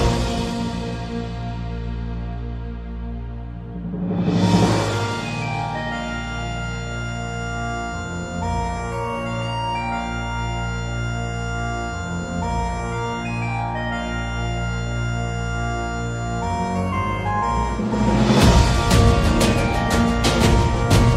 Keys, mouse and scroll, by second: 1.1-2.4 middle drag, 3.4 Tab, 3.7 a, 3.9 a, 4.5 ctrl+r, 8.1 middle click, 8.5 shift+middle click, 15.5 x, 20.0 Tab, 20.5 middle click, 21.0 a, 21.1 a.